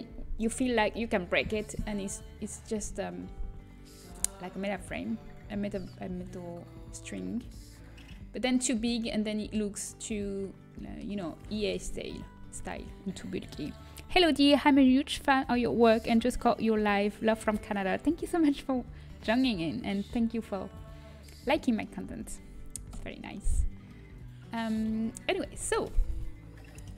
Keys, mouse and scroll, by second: 9.8-11.5 middle drag, 11.5 s, 21.5-22.8 middle drag, 22.8 KP_1, 23.8-24.9 middle drag, 25.8 KP_3, 26.8 KP_1.